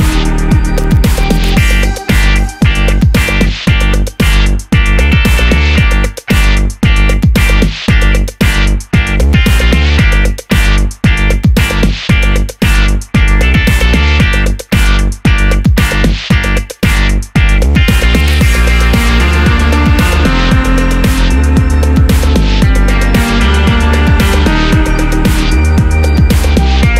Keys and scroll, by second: 5.0 super+a.